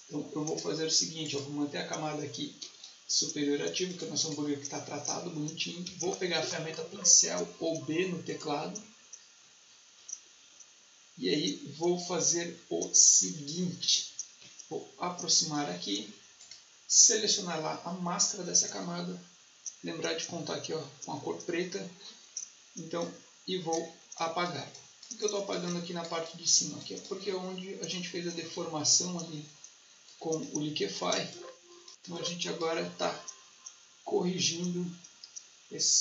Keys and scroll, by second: 5.8 b, 31.1 space.